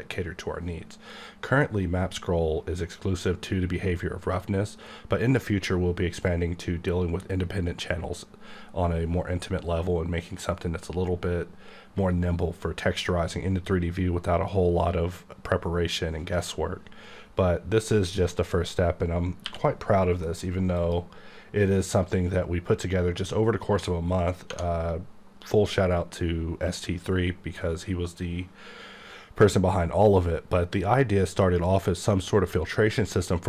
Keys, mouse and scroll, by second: 18.2 right click, 19.4 q, 20.2 m, 20.8 click, 24.5 Tab, 31.4 click.